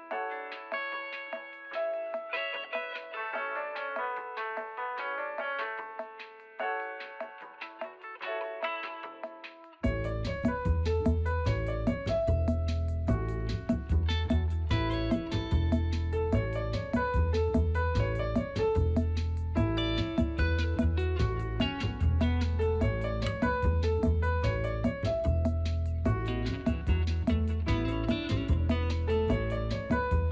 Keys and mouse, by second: 2.7 f, 4.5 a, 4.8 click, 5.8 f, 7.4 middle click, 8.0 middle click, 10.1 f, 10.6 click, 11.8 click, 12.3 f, 13.8 middle click, 14.8 middle click, 17.8 f, 18.0 f, 20.7 f.